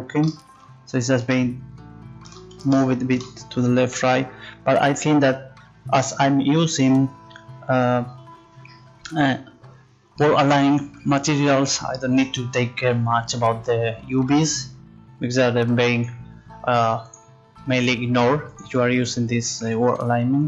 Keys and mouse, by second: 16.0-20.3 drag.